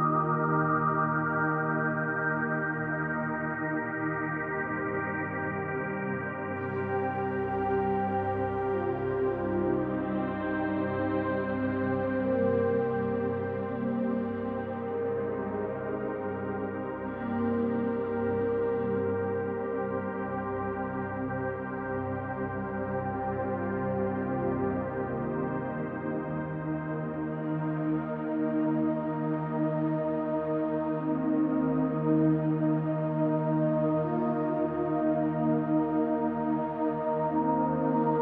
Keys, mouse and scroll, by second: 0.7 ctrl+d, 1.0-1.9 drag, 4.5 ctrl+d, 4.6-6.3 drag, 6.5 ctrl+d, 6.6-7.4 ctrl+drag, 8.4-8.7 typing, 10.0 click, 10.7 ctrl+click, 10.9 ctrl+d, 11.4-16.1 drag, 13.0 ctrl+d, 14.2 ctrl+d, 15.1 ctrl+d, 16.2 ctrl+d, 16.8-20.1 drag, 20.8 ctrl+d, 21.1-22.2 drag, 22.8-23.6 drag, 24.5 ctrl+g, 25.7 ctrl+d, 26.9-27.7 drag, 28.1 shift+Right, 28.3 shift+Right, 28.7-30.9 shift+Right, 30.9 Right, 31.2 Right, 31.4 Right, 32.8 click, 34.2-35.1 drag, 35.6-36.8 drag, 37.2-38.1 drag.